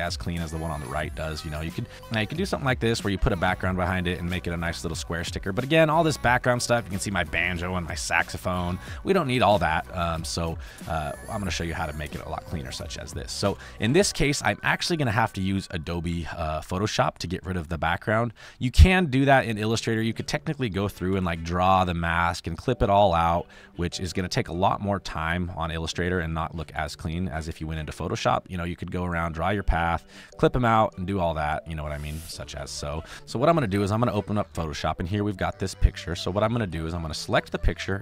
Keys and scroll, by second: 3.2 ctrl+q, 5.1 space, 9.2 space, 10.4 space, 13.4 space, 14.2 space, 14.9 space, 15.5 space, 17.5 space, 21.1 n, 32.3 v, 33.0 ctrl+z, 33.1 Delete, 36.5 space.